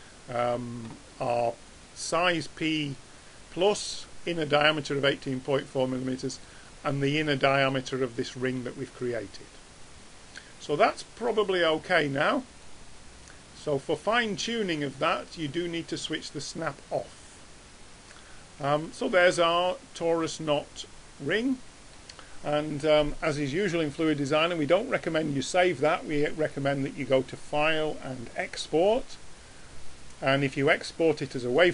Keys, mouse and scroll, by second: 1.6-3.6 drag, 3.0-3.4 middle drag, 8.2-9.1 drag, 9.1-9.8 middle drag, 9.8 drag, 20.4-21.3 middle drag, 26.5-28.3 drag.